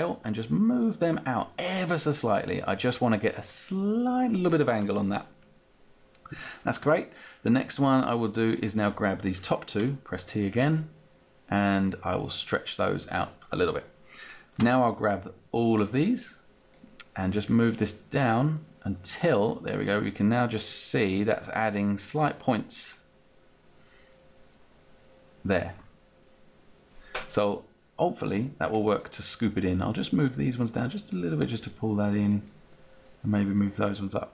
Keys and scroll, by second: 6.8 space, 7.5 space, 9.9 t, 14.6 space.